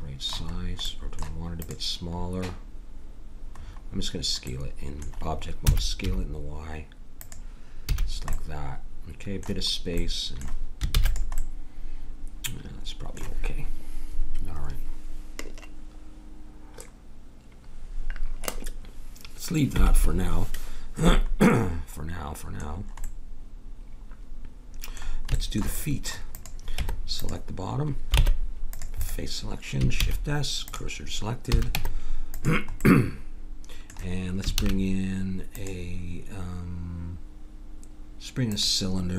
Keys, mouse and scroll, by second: 1.6-3.5 drag, 3.6 middle click, 5.7 s, 7.2 click, 7.8 a, 8.4-10.9 middle drag, 10.9 ctrl+s, 21.5-22.5 middle drag, 26.3 click, 26.8 Tab, 28.2 ctrl+Tab, 30.0 shift+s, 31.5 a, 31.7 Tab, 34.6 shift+a.